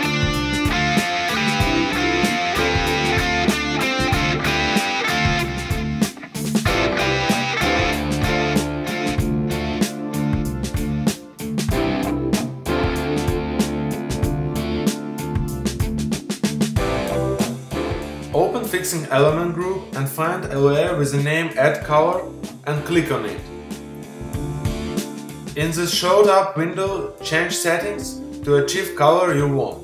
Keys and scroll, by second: 8.8 z, 11.3 space.